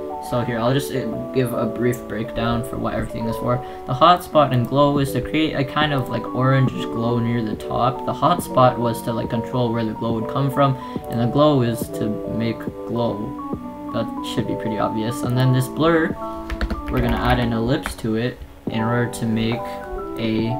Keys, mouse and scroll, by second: 4.7 click, 18.9 a.